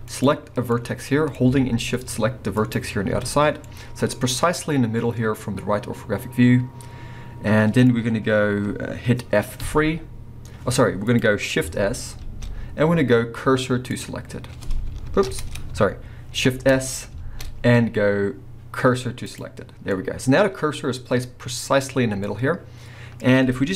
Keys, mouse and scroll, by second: 0.1 click, 0.7-2.6 middle drag, 2.6 shift+click, 3.2 scroll up 2, 3.4 scroll down 2, 3.6-11.2 middle drag, 9.6 F3, 11.2 click, 12.2 shift+s, 15.2 ctrl+z, 15.8 z, 16.5 shift+s, 19.9-22.2 middle drag, 22.2 scroll up 1.